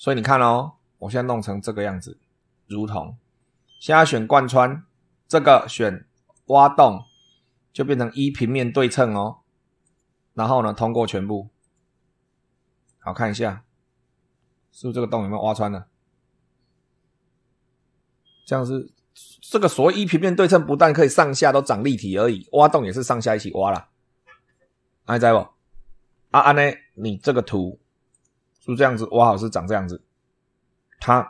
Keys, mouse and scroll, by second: 0.0 super+3, 1.7 click, 2.6 click, 6.2 click, 9.8 click, 10.8 click, 11.5 click, 12.8 click, 13.4 click, 13.4 right click, 14.2-19.0 middle drag, 27.1 click, 28.0 click.